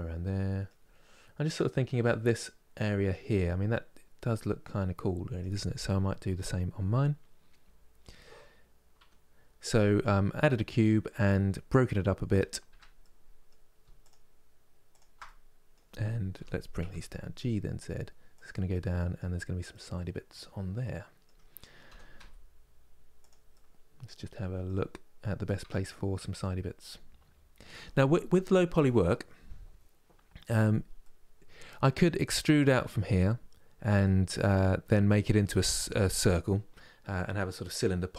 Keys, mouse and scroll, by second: 7.3 KP_1, 12.4 Tab, 12.7-13.7 middle drag, 13.7-14.9 shift+drag, 14.9-16.0 middle drag, 16.0 g, 18.4-21.6 middle drag, 21.6 g, 23.2-25.3 middle drag, 25.3 Tab, 25.5 click, 25.8-28.9 middle drag, 30.7-38.1 middle drag.